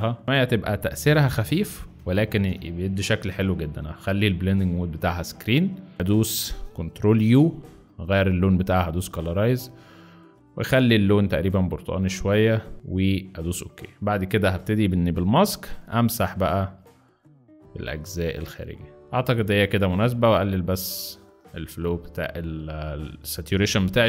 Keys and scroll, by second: 1.9 Return, 7.2 ctrl+u, 15.4 b, 19.0 Delete, 23.9 b.